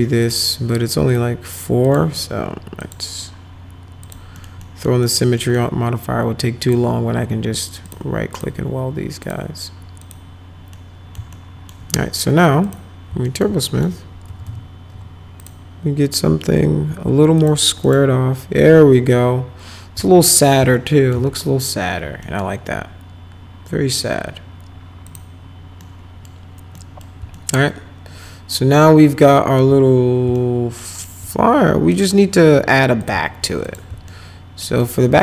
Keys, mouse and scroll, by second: 0.2 click, 1.1 click, 1.8 click, 2.8 click, 4.0 click, 4.4 middle click, 4.6 middle click, 5.1 middle click, 5.4 middle click, 6.6 click, 7.9 click, 8.3 click, 9.2 click, 10.0 click, 10.7 middle click, 11.3 alt+middle click, 12.7 click, 13.3 alt+middle click, 13.7 middle click, 14.3 F3, 14.5 F3, 14.9 F4, 15.4 click, 17.4 click, 17.8 click, 20.7 alt+middle click, 21.2 z, 22.2 middle click, 25.1 click, 25.8 middle click, 26.8 middle click, 27.3-29.6 alt+middle drag, 30.3 alt+middle click, 30.9 alt+middle click, 31.9 click, 33.0 click, 33.7 click, 34.1 alt+middle click, 34.8 alt+middle click.